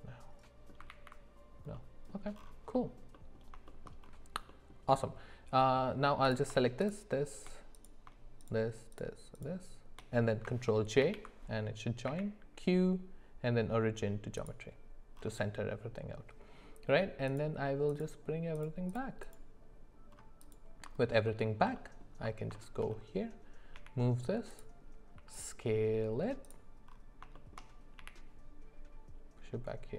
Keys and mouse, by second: 0.9 ctrl+z, 1.7 middle click, 2.7 middle click, 3.1 middle click, 3.7 shift+middle click, 4.5 middle click, 7.7 click, 8.9 shift+click, 11.0 ctrl+j, 12.0 q, 17.3 click, 17.9 click, 18.5 click, 18.9 click, 19.2 click, 21.0 alt+middle click, 21.3 alt+middle click, 22.5 shift+middle click, 23.7 g, 25.1 s, 27.3 middle click, 28.0 g.